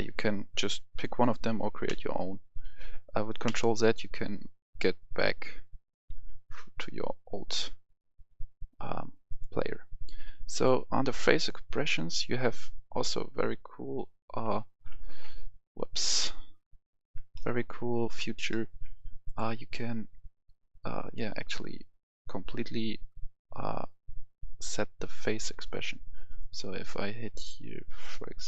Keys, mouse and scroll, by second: 0.5 scroll down 1, 1.9 ctrl+z, 3.5 z, 5.3-6.2 alt+scroll up 1, 6.3-6.7 ctrl+scroll up 1, 6.9-7.4 ctrl+scroll down 1, 7.5-9.2 alt+scroll up 2, 9.2 click, 12.6 alt+scroll up 1, 14.1-15.0 alt+scroll up 3, 16.1 KP_1, 16.7-17.1 scroll up 1, 17.3 shift+middle click, 17.9-18.3 scroll up 1, 18.5 shift+middle click, 19.2 click.